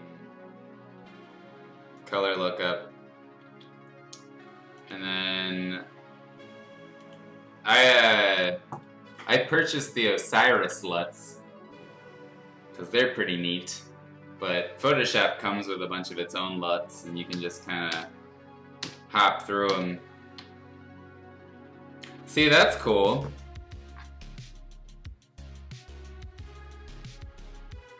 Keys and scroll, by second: 3.4 ctrl+z.